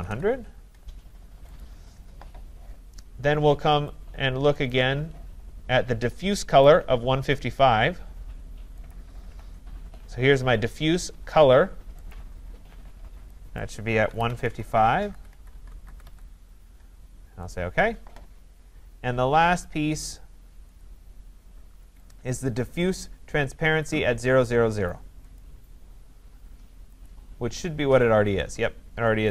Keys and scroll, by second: 14.7 Tab.